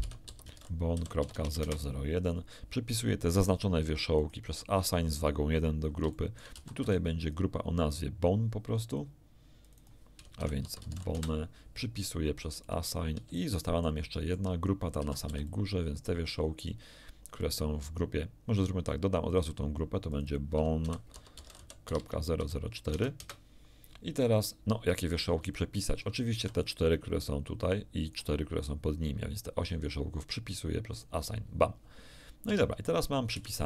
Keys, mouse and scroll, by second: 0.0-1.6 typing, 1.6 Return, 4.1 click, 6.1 shift+middle click, 6.5 shift+a, 6.8 b, 6.9 shift+click, 8.8 click, 9.6 click, 10.4 shift+b, 10.6 shift+o, 10.8 shift+n, 11.1 Return, 11.1 shift+e, 12.6 click, 13.4 shift+middle click, 14.1 shift+click, 15.0 shift+a, 15.2 b, 15.4-16.8 shift+drag, 19.2 click, 20.0 click, 20.8-22.8 typing, 23.2 Return, 25.2-25.5 scroll down 3, 25.5 shift+middle click, 26.3 shift+b, 26.6-28.3 shift+drag, 30.9 click, 32.4 Tab, 33.3 z.